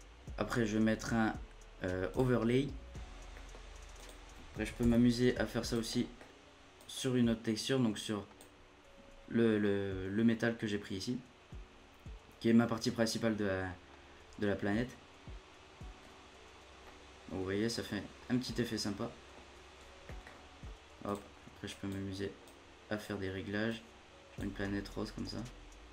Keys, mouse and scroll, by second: 2.9-3.3 scroll down 10, 3.3-3.9 middle drag, 3.9 click, 4.8 shift+d, 5.9 middle click, 6.7-15.9 drag, 15.9-16.3 scroll up 5, 16.3-16.8 scroll down 1, 16.8-19.3 middle drag, 19.3-20.1 scroll down 3, 20.1 middle click, 20.3-21.1 scroll up 11, 21.1-24.1 drag, 24.6-25.2 middle drag, 25.2-25.6 scroll up 4, 25.6-25.9 scroll down 2.